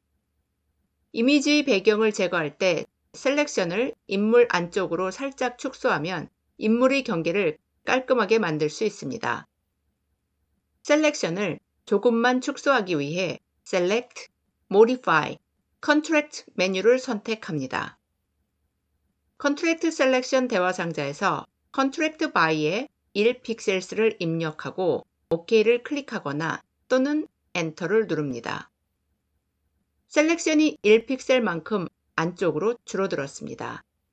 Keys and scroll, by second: 27.6 Return.